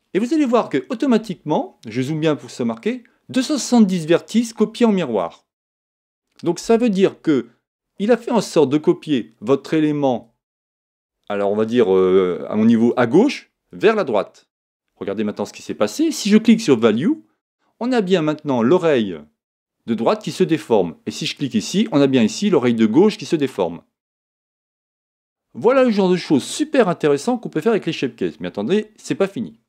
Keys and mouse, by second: 16.8 click, 21.4 click.